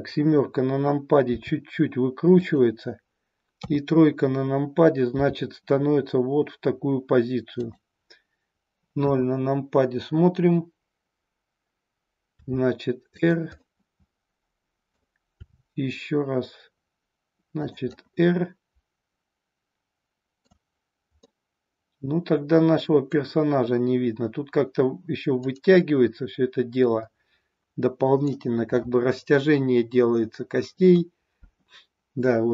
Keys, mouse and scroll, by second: 1.3 r, 3.5 KP_3, 5.2 r, 7.6 click, 9.0 KP_0, 12.3 r, 13.3 click, 13.5-14.9 middle drag, 15.4 r, 17.6 click, 17.9-20.5 middle drag, 21.3-23.1 middle drag, 25.4-28.2 middle drag.